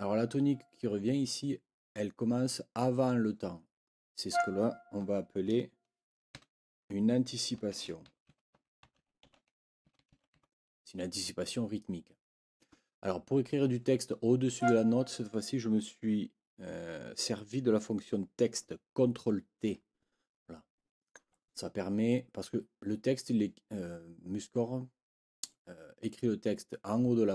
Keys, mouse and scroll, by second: 4.3 click, 6.3 ctrl+t, 7.5-10.8 typing, 12.1 Escape, 14.5 click.